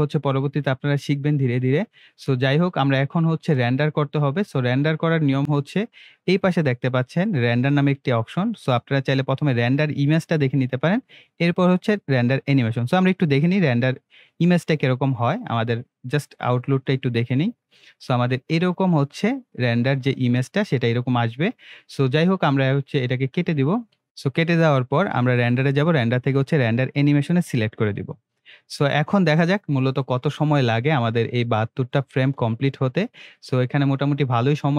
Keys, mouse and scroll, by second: 5.4 click, 7.5 click, 13.5 click, 16.2 click, 23.4 click.